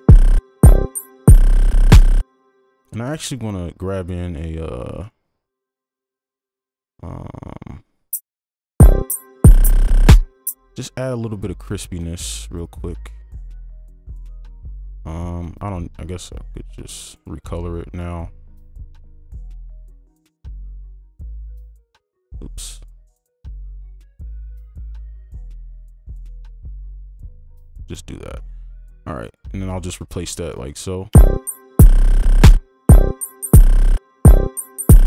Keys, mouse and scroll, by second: 0.0-0.4 typing, 2.2 space, 4.3-7.6 scroll down 1, 7.6-8.7 scroll up 1, 12.7-13.2 scroll up 1, 15.6-16.5 scroll up 1, 16.5-18.9 scroll down 2, 16.9 right click, 29.7 right click.